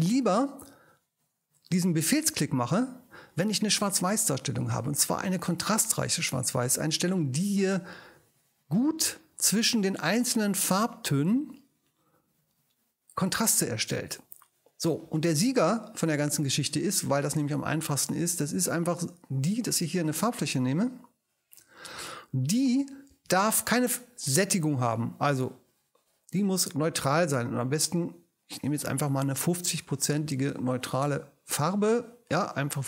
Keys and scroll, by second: 29.1 5, 29.5 0.